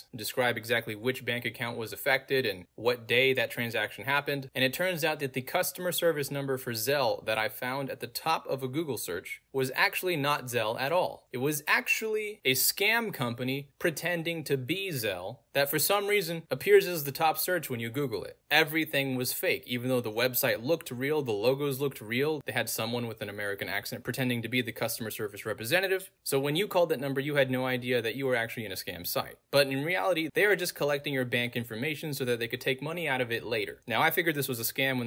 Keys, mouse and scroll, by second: 0.6 middle click, 0.6 scroll down 2, 1.6 middle click, 1.6 scroll down 2, 1.7-2.0 scroll up 3, 1.8 middle click, 2.4 click, 5.4 click, 6.2 a, 6.4 Return, 7.8 click, 9.7 click, 10.9 click, 12.1 click, 13.5 scroll down 2, 13.9 click, 14.5 scroll down 2, 15.9 click, 17.6 click, 18.6-20.1 middle drag, 18.6-19.2 scroll down 2, 19.2-20.1 scroll down 1, 20.1 click, 21.3 middle click, 21.3-22.1 scroll down 2, 23.0 click, 24.5 click, 24.9-25.4 scroll down 2, 26.1 click, 27.8 click, 28.6-29.2 scroll down 2, 29.4 click, 30.0-30.6 scroll down 2, 31.3 click, 31.8-32.2 scroll down 2, 33.0 click, 33.5 scroll down 2, 34.2 click.